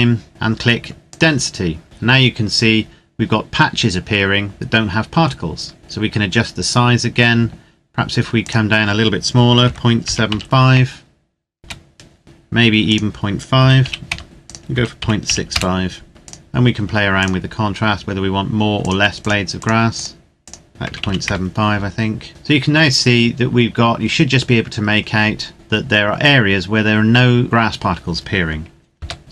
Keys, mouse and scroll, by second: 1.0 click, 5.6-6.4 scroll up 2, 6.4-8.1 scroll down 1, 8.3 click, 9.9 KP_7, 10.2 KP_5, 11.6 KP_Enter, 12.8 click, 13.7 KP_5, 14.0 KP_Enter, 14.4 click, 14.9 KP_6, 15.2 KP_5, 15.5 KP_Enter, 16.2 click, 20.7 KP_Decimal, 20.8 KP_7, 21.0 KP_5, 21.2 KP_Enter, 22.5-24.0 scroll down 1, 24.0-25.5 scroll up 1, 25.5 right click, 29.0 KP_0, 29.2-29.3 scroll up 1.